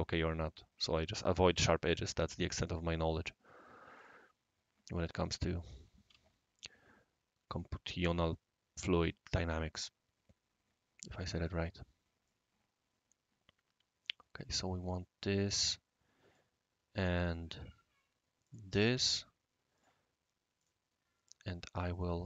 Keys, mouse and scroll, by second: 2.6 click, 3.9 click, 5.1 click, 7.5 click, 11.4 click, 12.2-16.4 right drag, 17.2 click, 18.4 click, 19.1 Escape, 19.7 click, 20.6 click, 21.9 click.